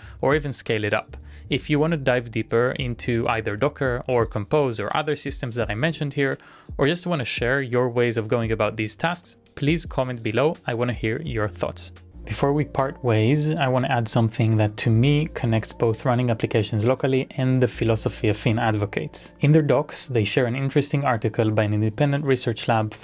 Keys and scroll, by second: 0.2-4.4 typing, 4.7 Return, 6.6-11.4 typing.